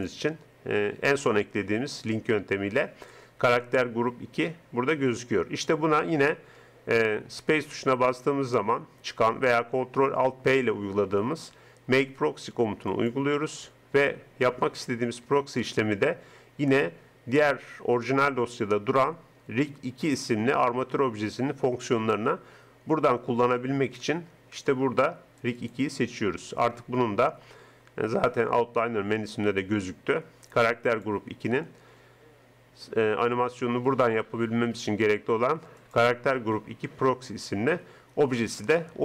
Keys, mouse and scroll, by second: 6.4 space, 15.2 BackSpace, 15.6 BackSpace, 30.9-32.9 drag, 35.8-37.7 drag.